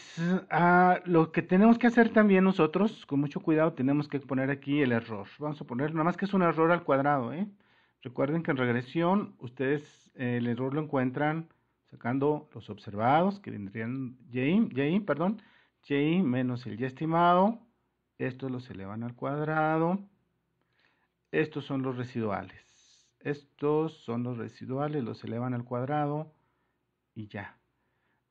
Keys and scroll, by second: 5.0-6.3 typing, 7.1 Return, 8.7 super++.